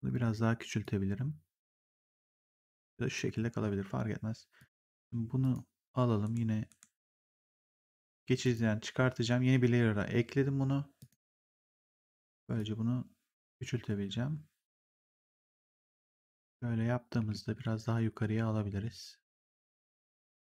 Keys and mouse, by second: 0.7 click, 4.5 click, 6.2 ctrl+1, 8.3 click, 10.9 click, 11.7 r, 12.5 click, 15.4 w, 16.1 shift+click, 18.1 click.